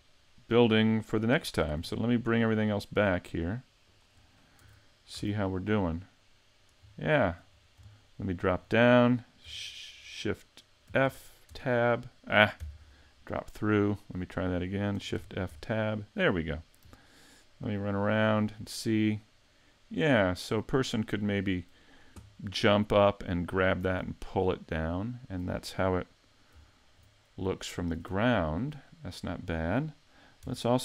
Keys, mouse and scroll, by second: 1.0 middle click, 2.6 shift+click, 3.2 shift+click, 3.8 shift+click, 4.6 a, 5.1 a, 5.4 middle click, 7.0 shift+middle click, 7.5 scroll up 3, 7.9 shift+middle click, 10.8 shift+f, 13.0 middle click, 15.1 shift+f.